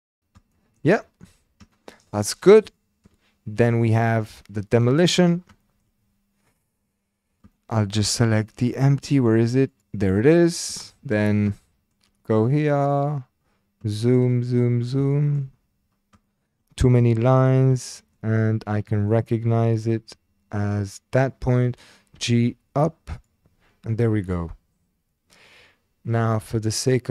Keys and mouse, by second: 0.5-0.9 shift+drag, 1.7 shift+click, 2.9 shift+drag, 3.7-4.1 shift+drag, 5.6 shift+click, 7.5 shift+click, 8.4 shift+drag, 9.7 click, 10.9-11.2 shift+drag, 11.6 shift+click, 14.0 shift+click, 15.2 shift+drag, 16.2-16.6 shift+drag, 17.8-18.2 shift+drag, 19.1 shift+drag, 22.1 g, 23.2 click, 26.9-27.1 drag.